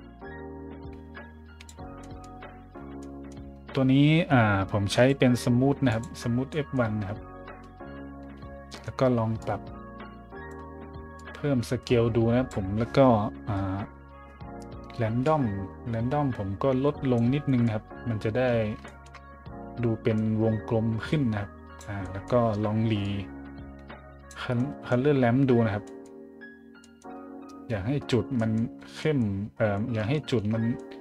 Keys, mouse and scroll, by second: 2.0 middle click, 3.0-3.3 middle drag, 4.9 click, 5.9 click, 6.5 middle drag, 8.6 middle click, 9.3-10.5 drag, 11.1-12.5 drag, 15.2-17.1 drag, 17.5-17.9 scroll up 3, 18.6 scroll down 2, 18.8-19.2 shift+scroll up 2, 20.1-21.8 drag, 22.0 scroll up 1, 23.0 click, 24.5-25.2 scroll up 2, 25.8-26.3 scroll up 2, 26.8-27.4 scroll up 2, 28.4-30.0 scroll up 7, 30.1 shift+middle click, 30.8 middle drag.